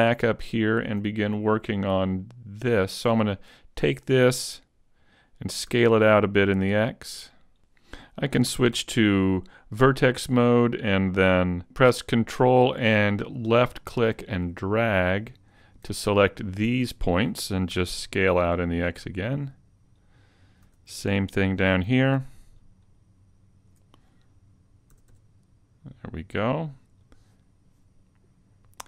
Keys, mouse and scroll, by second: 2.6 alt+right click, 5.7 s, 7.5 a, 7.7 click, 8.4 ctrl+Tab, 11.6 a, 12.3 ctrl+click, 17.7 s, 20.1 click, 20.6 a, 22.6 ctrl+click, 24.9 s, 27.1 click.